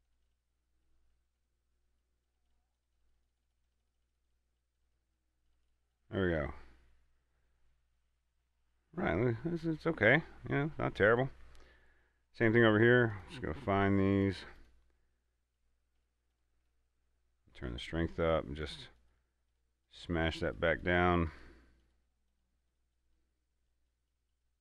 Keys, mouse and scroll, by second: 0.8 middle click, 2.2 click, 6.5 middle click, 6.8-7.7 scroll down 1, 9.6-11.6 middle drag, 11.6-11.9 scroll up 1, 11.9-13.4 middle drag, 13.4-24.1 drag.